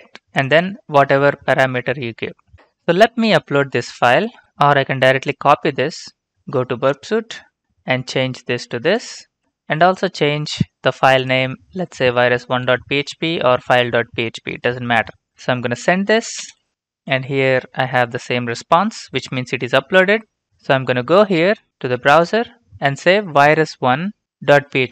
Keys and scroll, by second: 2.5 alt+Tab, 4.3 alt+Tab, 6.3 ctrl+c, 9.3 ctrl+v, 12.6 typing, 16.3 ctrl+space, 20.6 alt+Tab.